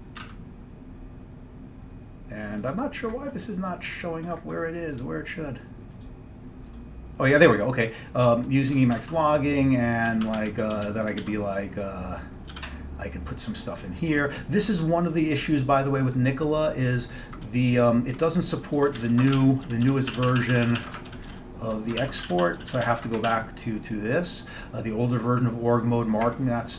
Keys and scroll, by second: 0.3 alt+Tab, 8.8 1, 9.1 alt+Tab, 9.3 alt+Tab, 9.3 1, 10.2 Down, 10.3 Down, 10.4 Down, 10.5 Down, 10.8 Return, 11.3 <, 12.4-13.1 typing, 17.3 Up, 18.0 Right, 18.6-19.6 typing, 19.7 ctrl+n, 19.9 ctrl+n, 20.2 ctrl+b, 20.3 ctrl+b, 20.5 ctrl+b, 20.6 ctrl+b, 21.1-22.1 typing, 22.3 ctrl+d, 22.5 ctrl+d, 22.7 ctrl+d, 22.8 ctrl+d, 22.9 ctrl+d, 23.3 ctrl+d.